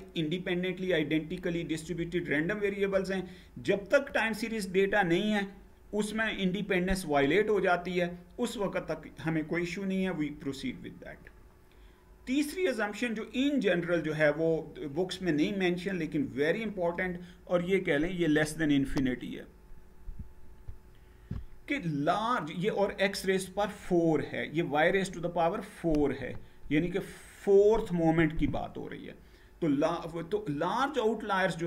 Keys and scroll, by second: 10.7 Page_Down.